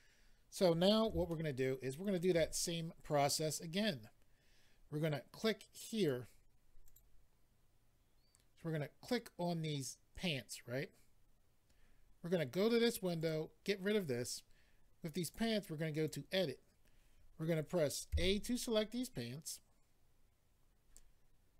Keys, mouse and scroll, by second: 1.2 shift+middle click, 2.7-3.4 scroll down 1, 5.9 click, 6.0 click, 6.8 click, 6.9 click, 9.0 click, 9.1 click, 13.2 click, 13.3 click, 15.2 click, 15.3 click, 15.9 click, 16.0 click.